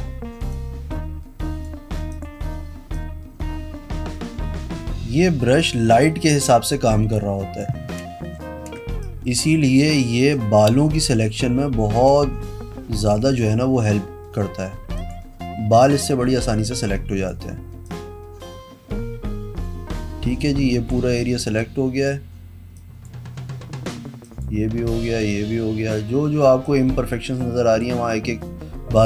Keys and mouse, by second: 0.7 click, 2.3 click, 8.9 space, 15.1 click, 16.2-17.4 drag, 18.0-21.0 drag, 21.7 click, 22.9 click, 24.4 click, 25.2 click, 26.8-28.0 drag.